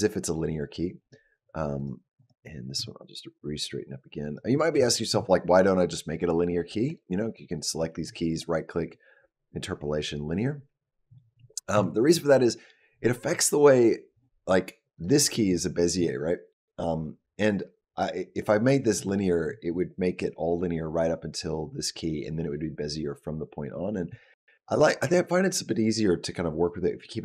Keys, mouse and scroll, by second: 1.6 click, 2.0 click, 2.6 r, 4.4 scroll down 1, 4.7 shift+middle click, 6.7 click, 7.2 click, 8.1 right click, 14.8 click.